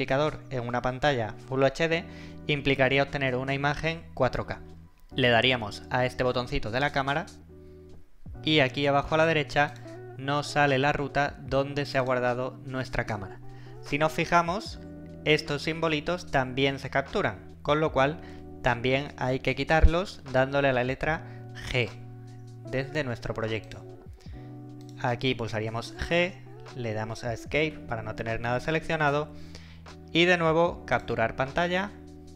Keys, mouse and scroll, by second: 6.9 click, 9.7 click, 21.9 click, 26.0 g, 27.7 Escape, 31.0 click.